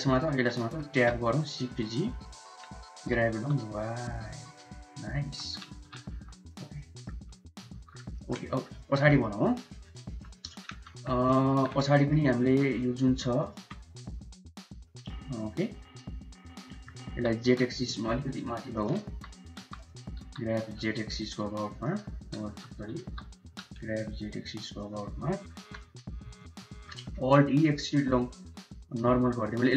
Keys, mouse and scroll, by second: 0.1 shift+click, 0.5 Tab, 1.0 shift+z, 1.7 click, 2.8 g, 5.1 Tab, 5.6 shift+z, 6.0 Tab, 6.3 click, 6.6 middle drag, 7.5 ctrl+s, 8.0 middle drag, 8.3 shift+middle click, 8.7 middle click, 9.0 middle click, 9.3 shift+middle click, 9.9 shift+middle click, 11.1 Tab, 11.1 middle click, 11.7 click, 11.7 3, 12.7 2, 13.3 alt+click, 13.9 click, 14.7 middle click, 15.2 middle click, 16.2 ctrl+click, 16.5 middle click, 17.0 g, 19.2 3, 19.5 1, 20.1 g, 22.3 ctrl+z, 23.3 g, 25.4 3, 25.6 click, 26.6 middle click, 27.2 alt+e.